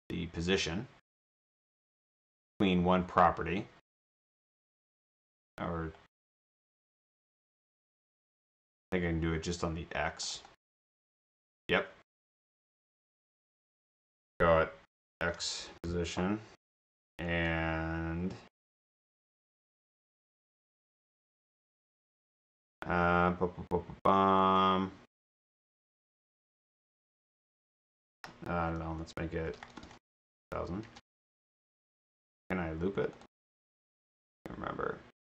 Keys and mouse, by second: 10.2 click, 10.3 click, 13.0 click, 15.4-16.3 typing, 24.4 click, 29.6-30.4 typing, 32.4 right click, 33.2 click, 33.4 click.